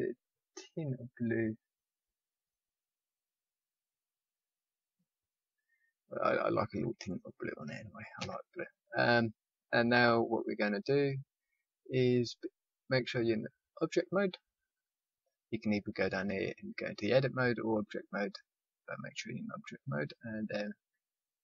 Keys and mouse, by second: 4.6-5.8 middle drag, 5.8 middle click, 8.1 a, 9.3 middle click, 9.8 middle click, 10.2 middle click, 18.0 click.